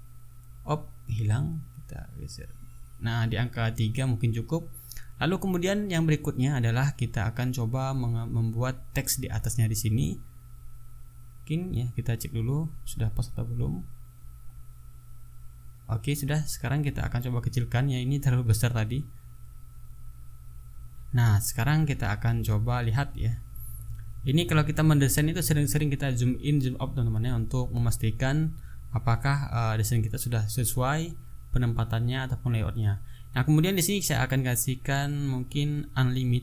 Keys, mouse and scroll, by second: 6.5-6.8 ctrl+scroll down 2, 7.6 ctrl+scroll up 2, 8.7 shift+s, 10.2 click, 11.3 shift+s, 13.6 click, 14.7 click, 15.2 click, 15.9 shift+s, 17.0-18.4 ctrl+drag, 18.9 ctrl+click, 26.6 click, 27.9 click, 29.5 click, 30.2 ctrl+scroll up 2, 30.9 ctrl+click, 34.3-36.4 typing.